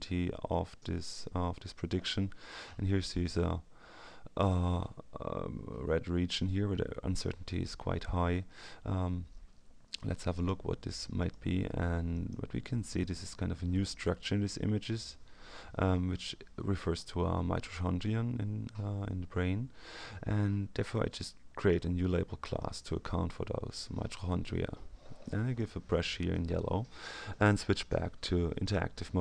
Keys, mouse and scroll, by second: 0.0-0.9 scroll down 1, 1.1-1.6 scroll up 1, 10.3 click, 11.2 click, 12.1 click, 13.0 click, 21.5 click, 22.5 click, 25.2-26.0 drag, 28.6 click.